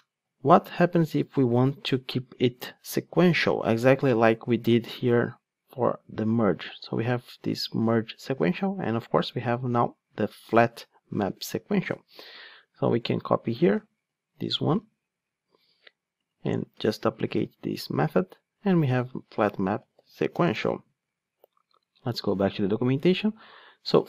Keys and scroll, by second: 14.1 super+x, 14.9 super+z, 17.0 super+v.